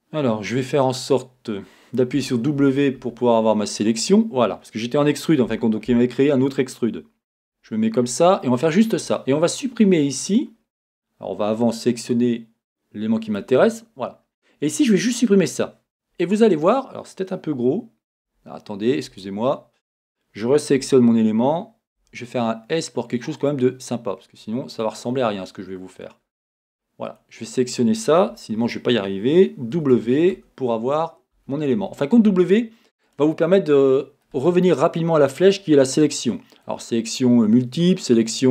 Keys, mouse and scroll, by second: 2.2 w, 3.7 click, 7.3 KP_1, 12.1-15.2 drag, 18.3 Tab, 20.8 l, 23.5 click, 24.3-24.9 scroll down 1, 24.9-27.1 middle drag, 26.2-27.1 scroll down 1, 27.1 click, 29.8 w, 33.1 click, 34.3-38.5 middle drag.